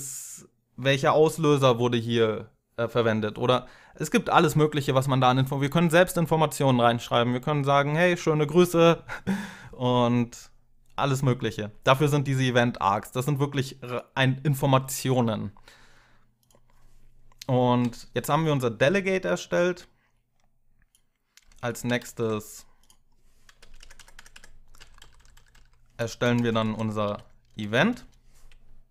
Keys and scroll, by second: 21.8 ctrl+x, 23.4 Up, 23.6 Up, 23.8 Up, 23.9 Up, 24.1 Up, 24.6 Down, 24.8 Down, 25.0 Down, 25.1 Down, 25.3 Down, 25.9 Return, 26.2 Return, 26.4 Up, 26.8 ctrl+v, 27.7 Return.